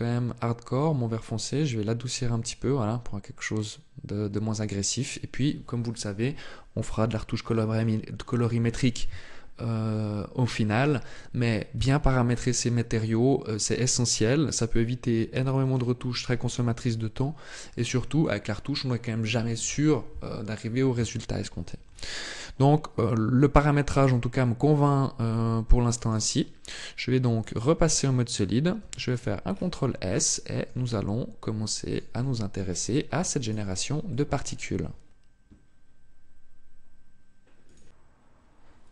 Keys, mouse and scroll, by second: 24.9 click, 26.3 click, 28.5 ctrl+s, 29.1 scroll down 6, 30.0 shift+middle click, 30.6 middle click, 31.9 shift+middle click, 32.5 scroll up 2, 33.1 right click, 33.8 middle click.